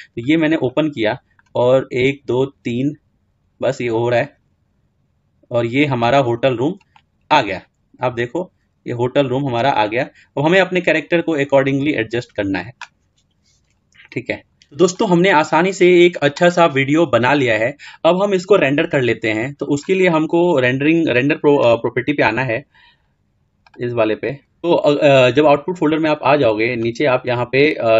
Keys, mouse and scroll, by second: 0.0-4.9 drag, 6.3 scroll down 1, 6.5-9.0 middle drag, 10.3-10.7 scroll down 4, 10.7-13.3 scroll up 7, 13.3-13.7 scroll down 2, 13.7-14.0 scroll up 2, 14.0-27.9 drag.